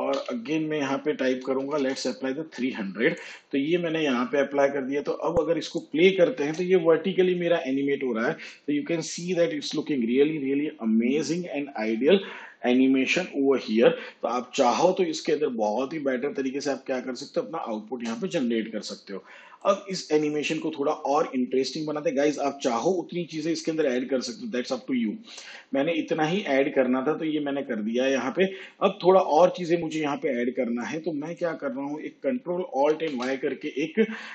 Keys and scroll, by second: 0.1 ,, 1.6 0, 6.4 space, 17.9 space, 32.9 ctrl+alt+y.